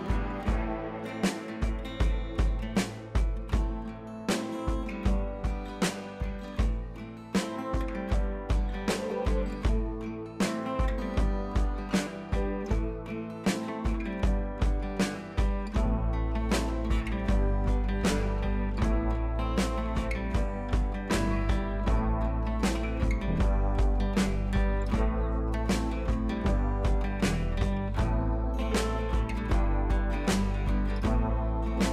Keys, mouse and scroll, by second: 0.6 click, 3.1 ctrl+j, 3.5 ctrl+t, 4.1 click, 4.4 scroll down 1, 4.9 ctrl+z, 5.8 ctrl+z, 6.6-7.0 click, 7.1 ctrl+z, 8.2 click, 10.6 ctrl+t, 11.2 click, 12.0-12.3 alt+click, 12.9 ctrl+z, 13.7-14.4 scroll up 1, 14.4 click, 16.6 shift+click, 17.2 ctrl+j, 18.1-19.7 alt+drag, 20.0-24.0 alt+drag, 26.3 scroll down 1, 26.8 scroll up 1, 28.2 space, 28.3-28.6 click, 28.6 space, 28.7 click, 30.8 right click, 31.3 click, 31.4-31.8 scroll down 1.